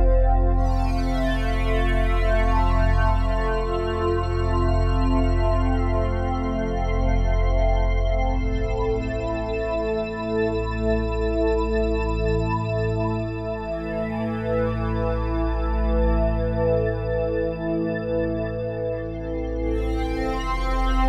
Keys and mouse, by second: 7.4-9.0 ctrl+alt+drag, 7.6 typing, 9.1-10.5 shift+drag, 9.3 typing, 10.5-10.8 typing, 12.4-18.6 drag, 17.1 typing, 18.8-19.5 typing, 19.5-21.0 alt+drag, 20.7 typing.